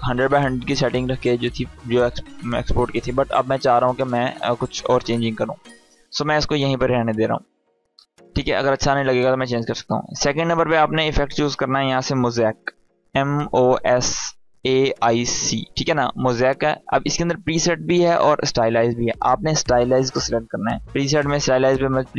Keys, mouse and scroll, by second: 10.4-11.0 click, 11.5-14.9 typing, 17.2-17.9 typing, 19.5 click.